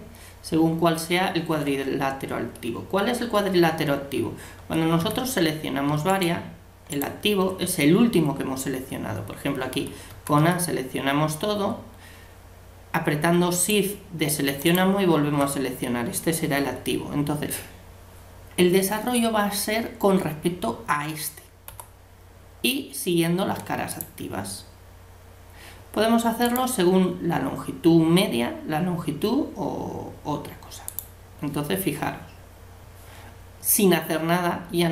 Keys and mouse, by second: 4.6 a, 5.0 a, 6.1-8.7 right drag, 10.1 a, 10.4 a, 13.7-16.6 right drag, 21.7 u.